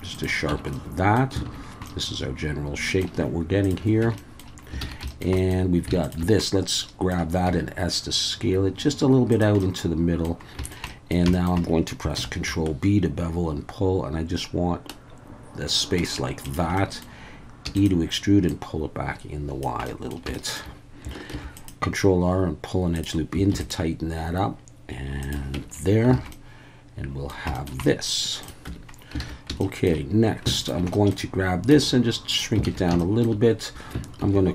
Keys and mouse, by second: 0.1 click, 0.5 Tab, 0.7-1.2 middle drag, 1.4 alt+a, 1.8-3.0 middle drag, 3.6 click, 4.0 Tab, 4.1 middle click, 4.8 alt+a, 5.1 shift+middle click, 5.3 middle click, 6.0 alt+shift+click, 6.4-7.1 middle drag, 7.4 s, 9.3 click, 9.6 middle click, 10.6 shift+middle click, 10.8 middle click, 11.3 shift+middle click, 12.2 ctrl+b, 16.4 shift+click, 16.7 middle click, 17.7 e, 17.7-19.6 drag, 19.9 middle click, 20.3 shift+middle click, 21.3 ctrl+r, 22.9 click, 23.5 ctrl+r, 25.2 click, 25.5 Tab, 26.1 alt+a, 26.3-27.3 middle drag, 27.5 shift+middle click, 27.8 middle click, 28.4 click, 28.6 Tab, 29.2 alt+a, 29.6 shift+middle click, 30.6 alt+shift+click, 30.9 middle click, 31.7 s, 32.3 click, 32.7 alt+a, 33.0 shift+click, 34.2 ctrl+r.